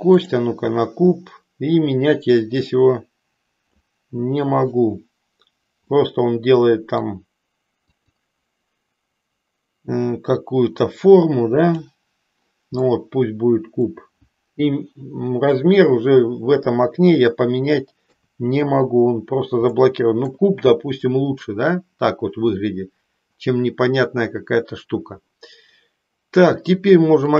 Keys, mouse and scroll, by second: 2.8-3.9 drag, 5.9-7.1 middle drag, 7.9 click, 11.6 click, 12.8-14.0 middle drag, 18.0 KP_3, 19.9 shift+middle click, 20.4 shift+scroll down 1.